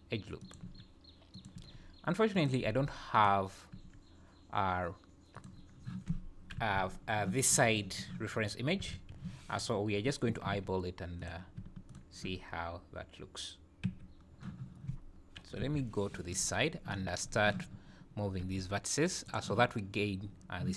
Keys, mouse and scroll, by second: 0.6 e, 1.9 e, 2.7 e, 3.7 e, 6.5 KP_3, 8.8 KP_3, 8.9 KP_1, 10.5 e, 11.8 shift+click, 13.8 f, 15.6 KP_3, 16.5 scroll up 4, 17.3 scroll up 2, 18.5 t, 19.3 click.